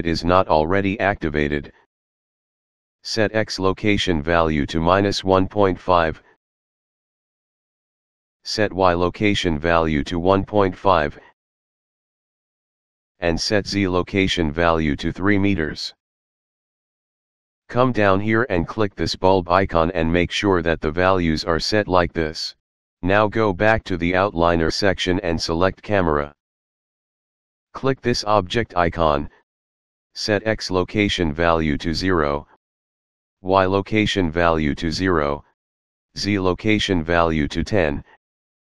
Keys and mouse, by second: 3.9 click, 5.3 KP_Subtract, 5.8 KP_1, 6.2 KP_Decimal, 6.5 KP_5, 6.9 Return, 8.9 click, 9.6 KP_1, 10.0 KP_Decimal, 10.4 KP_5, 10.7 Return, 14.4 click, 15.3 KP_3, 15.9 Return, 19.1 click, 25.1 click, 28.3 click, 31.0 click, 31.8 KP_0, 32.1 Return, 33.3 click, 34.0 KP_0, 34.4 Return, 36.1 click, 36.8 KP_1, 37.1 KP_0, 37.4 Return.